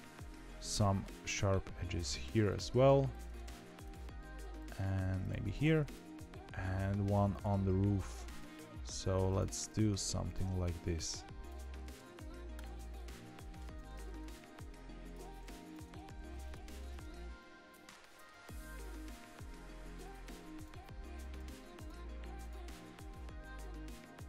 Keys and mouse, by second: 0.6 middle click, 3.4 ctrl+e, 4.1 middle click, 5.5 ctrl+e, 6.2 middle click, 7.3 click, 8.3 click, 9.6 click, 11.9 ctrl+e, 12.9 middle click, 13.6 Tab, 13.9 middle click, 14.0 Tab, 15.0 click, 16.0 ctrl+e, 16.7 Tab, 17.3 middle click, 18.3 Tab.